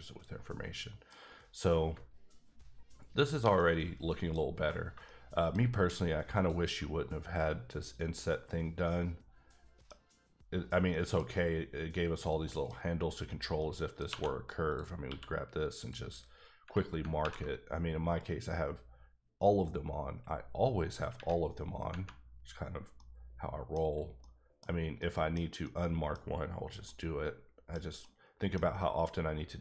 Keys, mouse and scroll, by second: 3.6 middle click, 4.5-5.0 scroll up 3, 5.0 shift+middle click, 6.3 alt+click, 8.6 scroll down 1, 8.8 middle click, 10.1-10.9 scroll up 1, 10.9 middle click, 12.1 scroll down 3, 12.4 middle click, 12.7-13.6 scroll up 3, 13.6 middle click, 14.1 2, 14.7 click, 15.0 q, 15.7 click, 16.6 Tab, 22.6 scroll down 2, 22.9 middle click, 23.8-24.2 scroll up 2, 24.2 middle click, 24.6 scroll down 2, 25.0 middle click, 25.6 middle click, 26.2 scroll up 2, 26.6 scroll down 1, 26.8 middle click, 28.0 middle click, 28.7 scroll up 1, 29.2 scroll up 1.